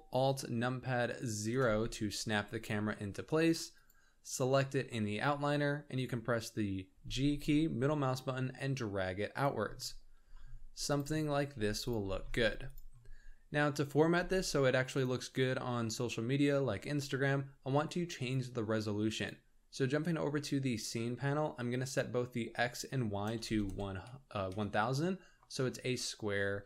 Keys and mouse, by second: 1.4 ctrl+alt+KP_0, 1.6 ctrl+alt+KP_0, 6.9 g, 10.2 g, 11.5 g, 12.1 g, 21.7-24.5 drag, 23.5 KP_0, 26.4 g.